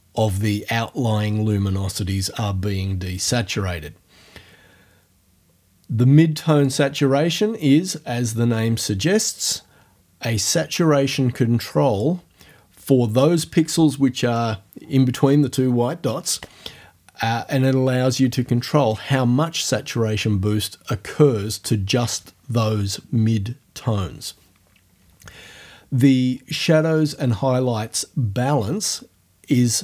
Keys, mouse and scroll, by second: 6.6-12.2 drag.